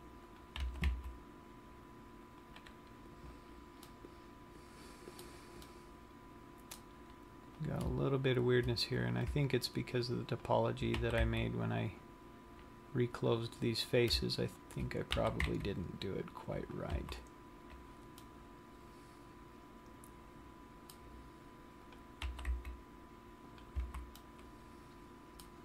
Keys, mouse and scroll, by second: 0.6 click, 0.8 g, 2.7 click, 4.2 middle click, 6.0 middle click, 7.7 click, 9.1-10.8 scroll up 7, 10.8 shift+click, 11.4 g, 13.6 click, 14.3 click, 14.9 shift+click, 15.3 shift+click, 15.3 g, 17.1 click, 17.2 a, 17.4 scroll down 1, 18.3 middle click, 22.2 click, 22.5 g, 23.8 click, 24.1 a, 24.4 middle click.